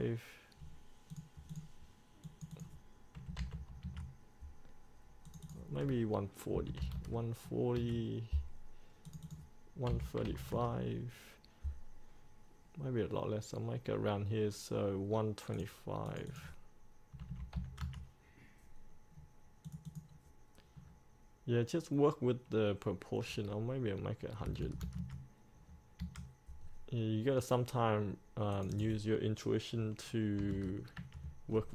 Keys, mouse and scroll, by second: 1.3 click, 3.4 KP_1, 3.7 KP_5, 5.4 click, 6.7 KP_1, 9.2 click, 10.0 KP_1, 15.7 click, 17.4 KP_1, 19.8 click, 24.6 KP_1, 28.7 click, 30.6 KP_5.